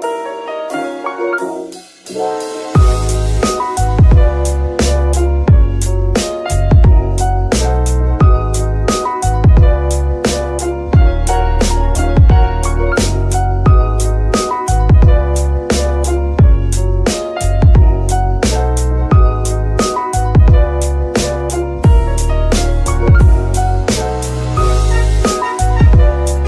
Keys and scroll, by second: 10.1 r, 10.9 Escape, 12.8 alt+z, 18.3 ctrl+c, 20.0 ctrl+v, 23.1 g, 23.2 y, 26.1 Escape.